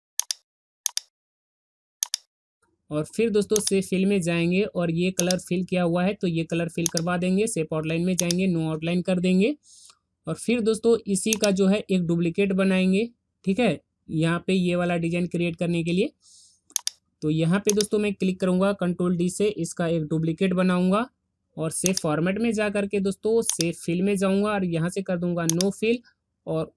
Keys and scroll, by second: 19.9 ctrl+d.